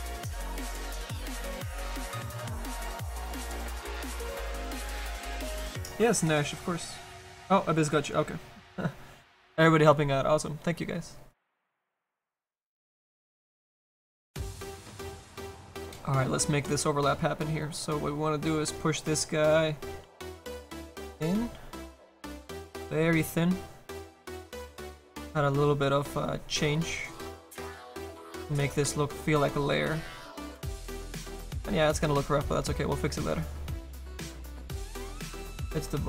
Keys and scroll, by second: 35.1 s, 35.8 s.